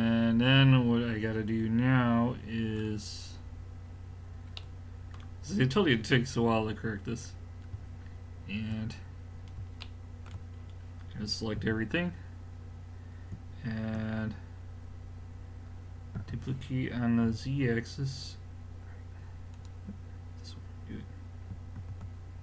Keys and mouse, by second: 6.5 middle click, 8.0-9.8 middle drag, 11.6 a, 16.2 d, 17.2 z, 19.7-21.4 right drag, 21.8 ctrl+z.